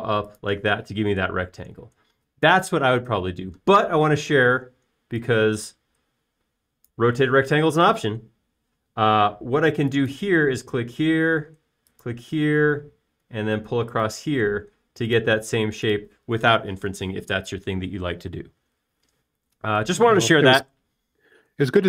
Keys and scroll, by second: 15.9 space.